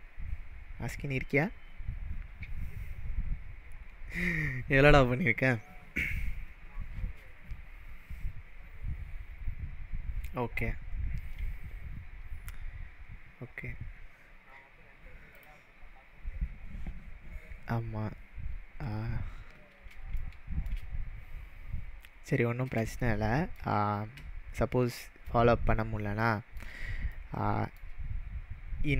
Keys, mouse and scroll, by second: 15.3 click, 19.8 click, 20.2-20.7 shift+middle drag.